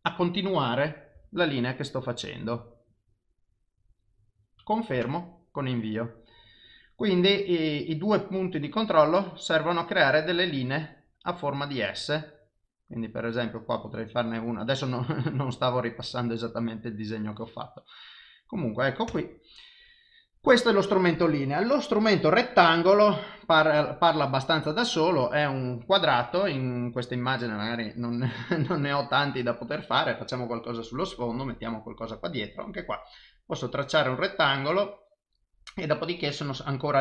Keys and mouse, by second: 8.1 click, 22.8 click, 30.5 click.